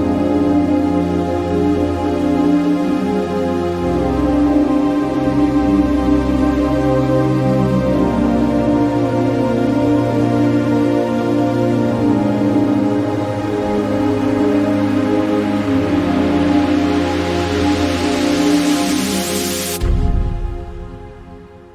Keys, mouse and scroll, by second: 6.2-9.3 drag, 8.4 typing, 9.7 typing, 11.8-19.9 drag, 11.8 typing.